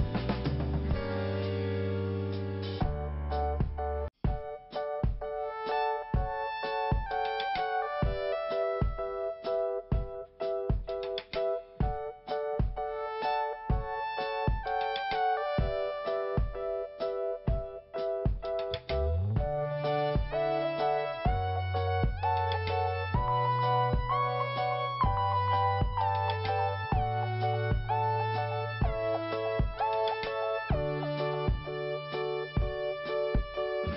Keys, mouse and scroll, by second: 2.7 click, 12.0 click, 13.3 click, 13.4 click, 14.3 click, 15.8 click, 15.9 click, 17.0 click, 17.1 click, 17.7 click, 17.9 click, 18.6 click, 19.7 click, 22.8 click, 25.1 click, 25.2 click, 26.3 click, 26.3 click, 27.1 click, 28.9 click, 32.1 click.